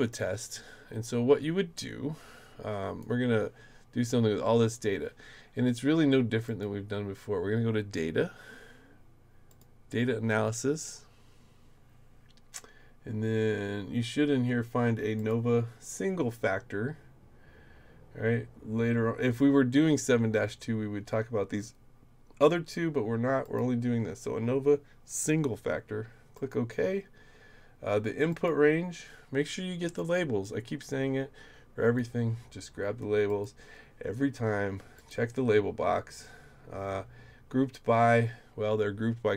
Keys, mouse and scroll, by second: 0.1-3.0 drag, 6.5 click, 9.5 click, 12.7 middle click, 13.2-14.0 scroll down 1, 14.0-14.4 scroll up 1, 15.2 click, 23.4 click, 26.3 click, 28.3 click, 30.0-32.0 drag, 33.3 click, 35.0 click.